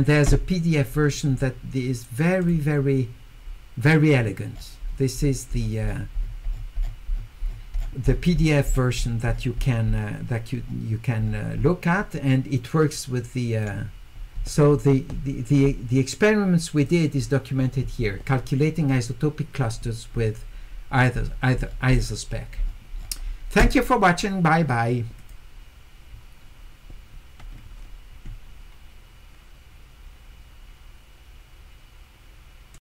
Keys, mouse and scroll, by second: 0.9 click, 2.4 click, 4.5-5.0 scroll up 2, 5.2 middle click, 5.2-8.4 scroll up 8, 5.6 middle click, 5.9 middle click, 6.2-8.5 middle drag, 8.4 scroll down 2, 9.0 middle click, 9.0-9.8 scroll up 4, 9.3 middle click, 10.0 scroll down 2, 10.6 scroll up 2, 11.2-12.0 scroll up 2, 12.9 click, 16.8 click, 20.9 middle click, 20.9-22.1 scroll up 4, 21.2 middle click, 22.3-23.2 scroll down 2, 25.2 click, 32.7 click.